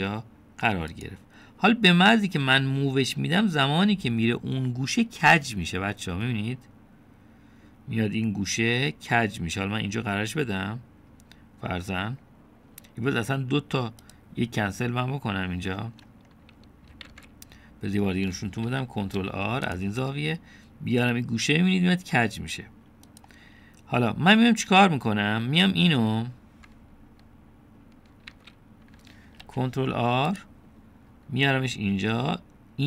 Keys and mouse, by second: 15.7-16.7 middle drag, 18.1 ctrl+z, 19.7 ctrl+r, 25.0-26.2 middle drag, 29.3 ctrl+z, 30.4 ctrl+r.